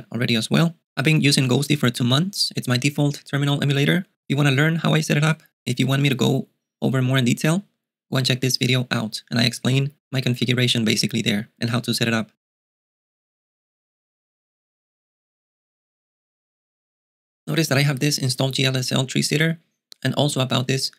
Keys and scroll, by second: 3.1 Return.